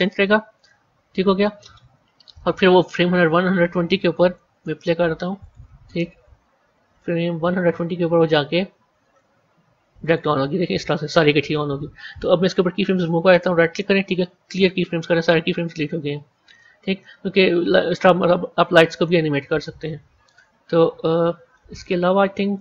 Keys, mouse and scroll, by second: 5.3-8.7 drag, 10.2-13.1 drag, 13.2-16.2 right drag, 16.2-18.8 drag, 18.8 middle click, 19.6 z, 20.2 click, 20.6 scroll down 3, 21.4-22.6 middle drag.